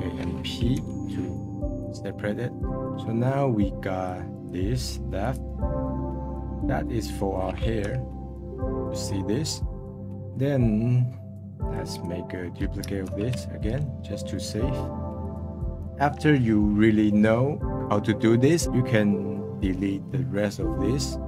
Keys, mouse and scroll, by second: 0.7 p, 2.5-4.0 middle drag, 4.0-5.7 drag, 5.7 scroll down 2, 5.9-7.9 middle drag, 7.9 /, 8.3 scroll down 1, 8.6-9.9 middle drag, 10.0 middle click, 10.6 scroll down 2, 11.6-13.0 drag, 13.0 shift+d, 15.2-17.4 drag, 18.6-21.0 middle drag, 21.0 scroll up 3.